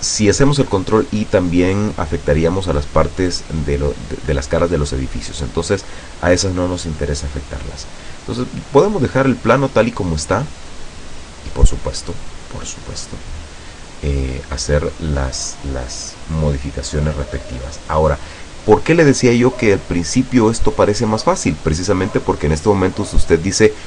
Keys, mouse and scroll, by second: 7.9 scroll down 2, 8.3-12.7 middle drag, 12.7-13.6 scroll up 2, 13.7-14.3 scroll down 2.